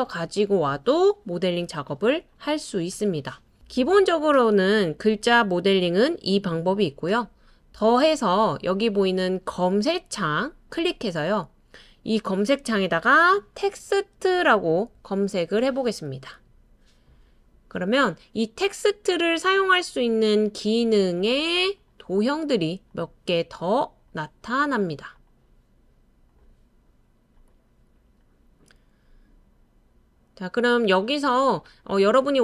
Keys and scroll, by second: 0.1 BackSpace, 0.3 BackSpace, 13.4-14.9 typing.